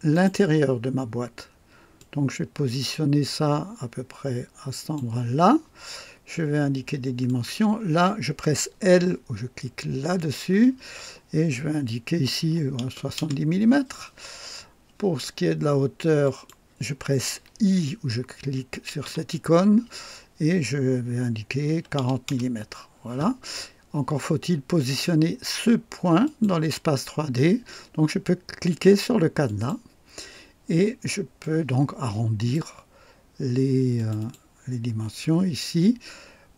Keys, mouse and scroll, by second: 0.1 right click, 1.9-5.1 drag, 7.2 click, 10.3 l, 12.4 KP_7, 12.7 KP_0, 13.1 Return, 16.2 click, 19.0 i, 21.7 KP_4, 21.9 KP_0, 22.2 Return, 26.2 click, 29.4 click, 31.4-32.7 drag, 33.9 click.